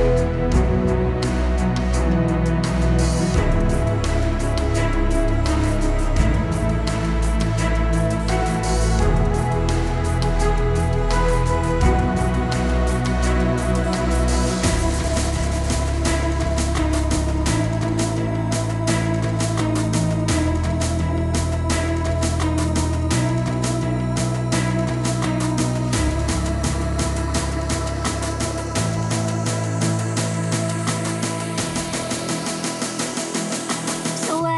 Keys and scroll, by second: 34.0 t.